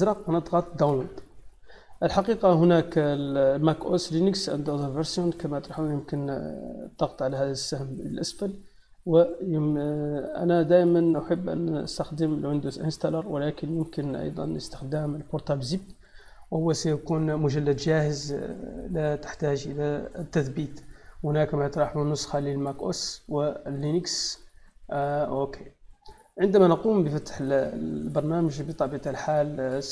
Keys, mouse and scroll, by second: 5.2 click, 26.1 click, 27.3 click, 29.5 click.